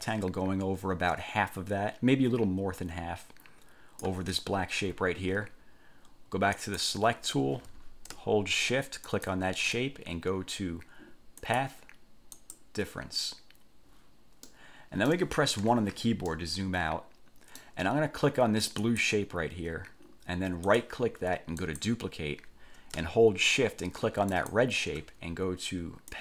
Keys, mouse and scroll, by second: 6.7 click, 9.3 shift+click, 11.6 click, 12.5 click, 14.7-15.5 middle drag, 15.8 1, 16.5-18.0 middle drag, 19.0 click, 20.9 click, 21.8 click, 24.5 shift+click.